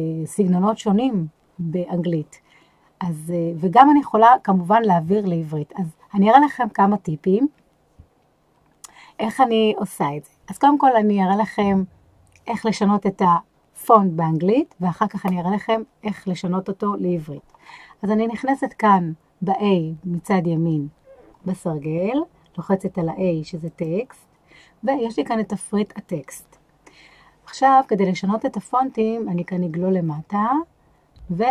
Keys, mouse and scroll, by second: 23.6 click, 28.9-30.0 scroll down 2, 30.0-31.5 scroll down 1.